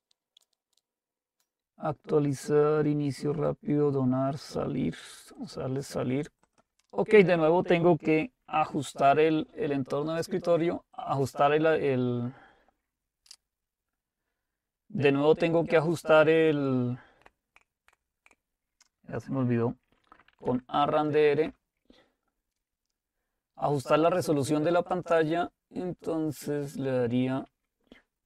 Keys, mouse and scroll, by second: 5.4-8.1 drag, 11.0 click, 15.4-16.5 drag, 19.8-20.9 typing, 21.4 Return, 23.2 typing, 23.9-26.7 drag.